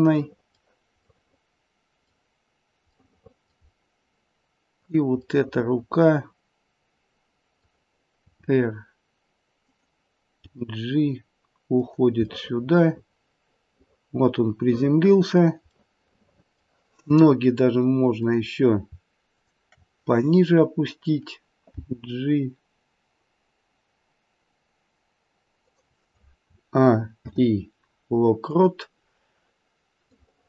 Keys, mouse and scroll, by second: 0.2 middle click, 1.0 middle click, 1.5 middle click, 2.9 middle click, 3.6-4.8 scroll down 1, 4.8 click, 5.3 middle click, 6.2 middle click, 6.4 middle click, 6.8 middle click, 8.2 r, 10.3 g, 12.3 middle click, 15.9 middle click, 16.0 middle click, 16.2 middle click, 18.1 click, 19.2 shift+click, 21.8 g, 26.4-27.2 a, 27.2 i, 30.1 click.